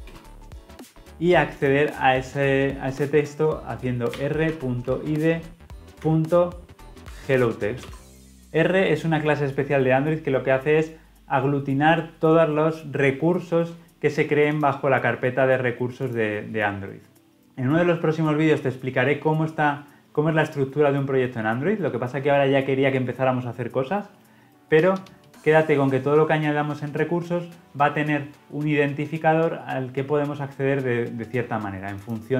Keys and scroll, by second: 7.8 Return.